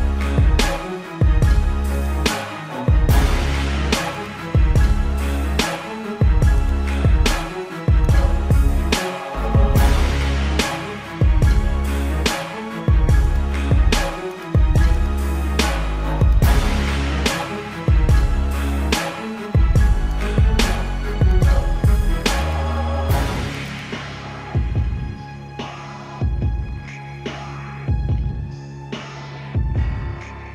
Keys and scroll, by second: 1.9 ctrl+alt+z, 4.0 space, 10.1 space, 11.0 ctrl+alt+z, 11.6 space, 11.9 space, 12.5 ctrl+alt+z, 13.1 ctrl+-, 13.5 space, 13.9 ctrl+-, 14.1 space, 15.1 space, 15.5 space, 16.4 space, 19.4 space, 21.2 space, 26.0 space, 28.1 space, 28.4 space, 28.7 space.